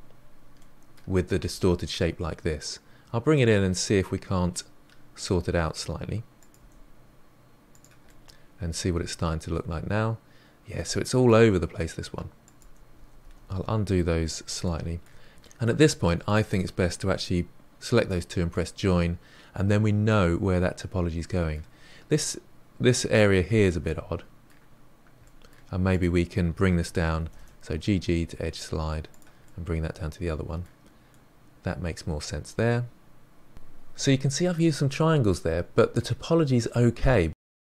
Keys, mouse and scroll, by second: 1.3 g, 3.7-6.3 middle drag, 6.3 click, 6.5 g, 8.0-11.1 middle drag, 12.4 click, 12.5 g, 12.9 ctrl+z, 13.1 ctrl+z, 13.4 ctrl+z, 14.6 middle click, 15.4-16.2 middle drag, 16.2 shift+click, 17.9 j, 18.5-21.5 middle drag, 23.8-25.9 middle drag, 25.9 click, 27.2 g, 29.4-34.1 middle drag, 35.0 click, 36.6-37.0 scroll down 2, 37.0-37.7 middle drag.